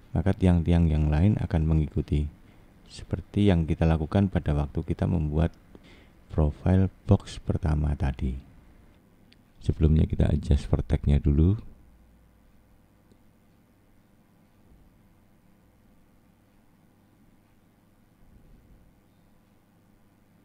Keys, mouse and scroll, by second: 0.6 scroll up 1, 1.6 middle click, 2.5 click, 10.0 middle click, 12.2 click, 12.7 scroll up 2, 13.2 scroll down 2, 14.3 shift+middle click, 16.3 click, 17.4 click, 19.1 middle click, 20.1 click.